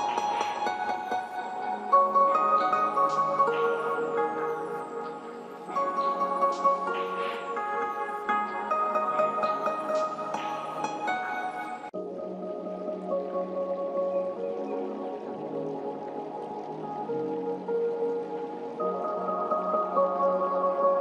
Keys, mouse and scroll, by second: 3.3 scroll down 1, 4.8 g, 5.8-8.5 drag, 17.7 click.